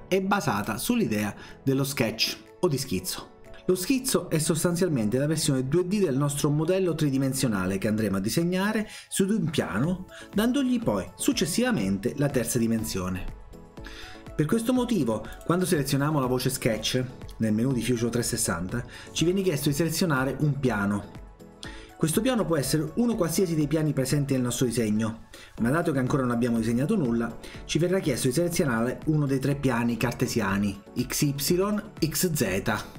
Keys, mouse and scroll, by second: 0.6 click, 15.3 click.